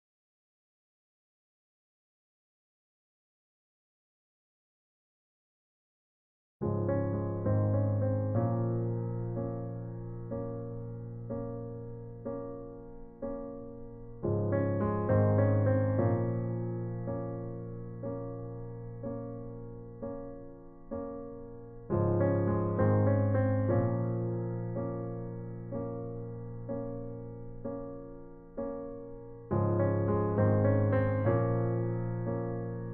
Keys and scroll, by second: 14.4 e.